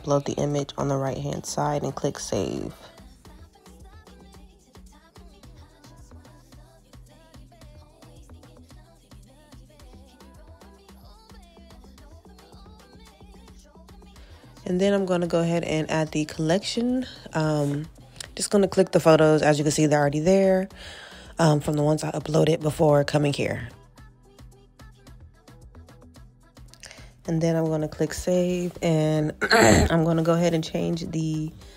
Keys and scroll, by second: 4.8 alt+q, 29.2 alt+q.